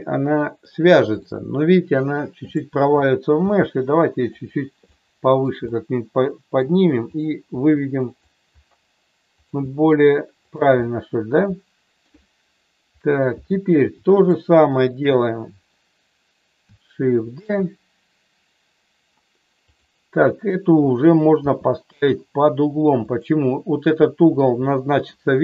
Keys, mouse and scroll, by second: 1.2 middle click, 2.4 click, 3.4 g, 4.0 click, 4.9 middle click, 5.6-6.6 middle drag, 7.0 click, 7.4 g, 8.0 click, 9.4 click, 9.5 g, 10.4 click, 10.8-11.9 middle drag, 14.9 shift+click, 17.3 shift+d, 19.7 click, 21.4 r, 23.0 click.